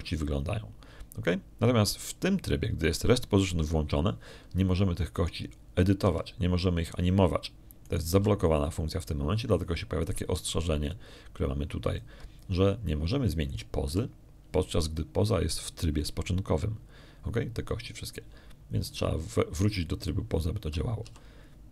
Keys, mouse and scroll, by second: 0.3 click, 1.5 middle click, 2.3 middle click, 7.0 click, 7.9 r, 9.7 click, 10.0 r, 12.8 alt+click, 13.2 alt+click, 15.3 click, 15.8 r, 20.7 click.